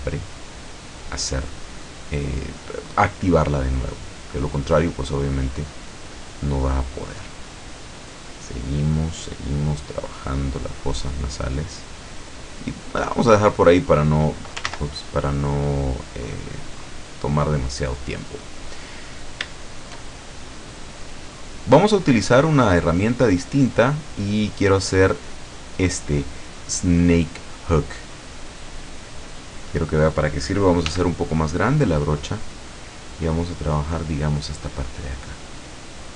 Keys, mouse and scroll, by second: 0.1 scroll down 1, 0.6-3.1 middle drag, 3.4-6.9 drag, 7.0-10.3 drag, 10.4-12.4 drag, 12.6-13.7 drag, 13.8 middle click, 14.7 ctrl+z, 15.2-16.4 ctrl+drag, 16.4 middle click, 17.1-17.8 scroll down 4, 18.2-18.6 scroll up 2, 18.8 middle click, 19.3 middle click, 19.6 shift+middle click, 20.5-21.6 middle drag, 21.8-22.4 scroll up 2, 23.2 click, 28.1 click, 30.9 f, 31.8 click, 32.3 scroll down 1, 32.8 middle click, 33.4 middle click, 35.9-36.1 drag.